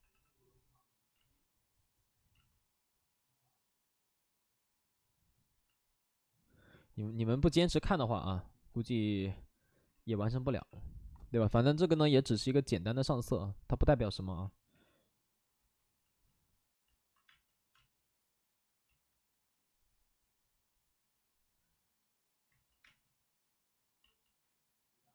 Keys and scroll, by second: 0.1 c, 1.1 ctrl+z, 2.3 ctrl+z, 10.3 v, 10.5 c, 14.3 b, 14.7 p, 17.2 space, 17.7 space, 18.8 ctrl+z, 22.5 ctrl+z, 22.8 space, 23.6 space, 24.0 ctrl+z, 24.2 ctrl+z.